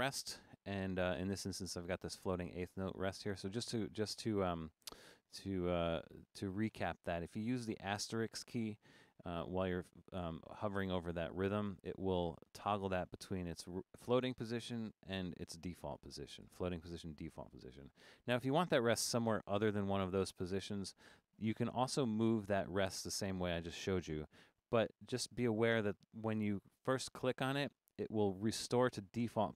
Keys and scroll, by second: 9.8 Down, 10.1 Down, 11.7 typing, 12.9 typing, 16.2-17.2 typing, 19.5 *.